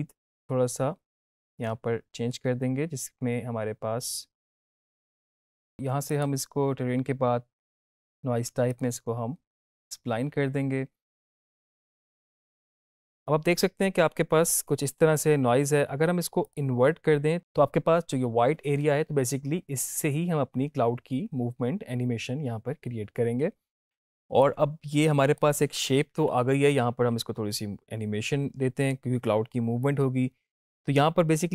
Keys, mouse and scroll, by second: 4.5 click, 8.6 click, 14.4 click, 24.3-25.6 drag.